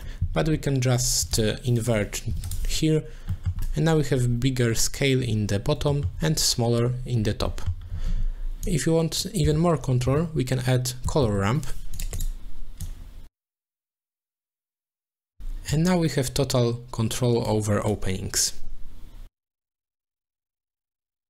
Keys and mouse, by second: 0.9 click, 1.8 click, 3.3 middle click, 5.9 shift+middle click, 7.6 middle click, 8.6 click, 8.9-12.0 drag, 12.8-14.4 drag, 15.0 click, 15.7-17.5 drag, 17.9-19.7 drag, 20.4-21.2 drag.